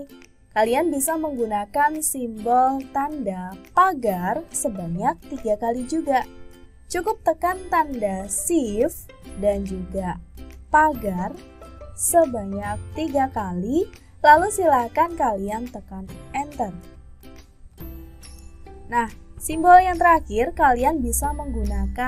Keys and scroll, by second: 3.7 #.